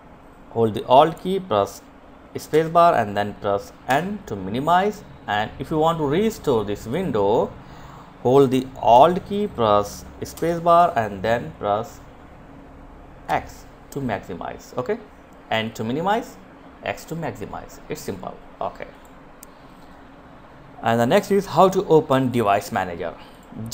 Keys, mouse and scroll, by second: 1.2 alt+space, 2.5 n, 4.2 click, 12.0 x, 17.5 click.